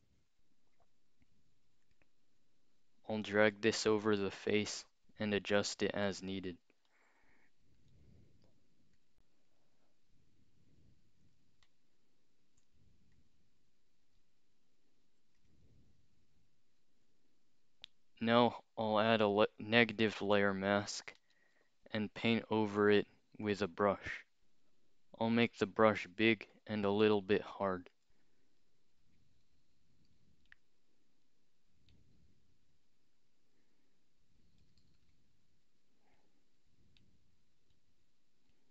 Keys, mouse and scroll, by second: 2.0-4.2 drag, 6.9 alt+shift+click, 8.2-8.9 scroll up 2, 9.0 click, 11.7 alt+shift+click, 13.2 click, 15.4 click, 17.6 scroll down 2, 21.2 alt+click, 22.6 click, 23.5 click, 25.5 click, 26.5 click, 27.5-27.9 scroll up 2, 27.9 click, 29.5 [, 29.6 [, 30.5 click, 31.9 click, 33.6 scroll down 2, 35.0 [, 36.2 click, 37.0 click, 38.5 click.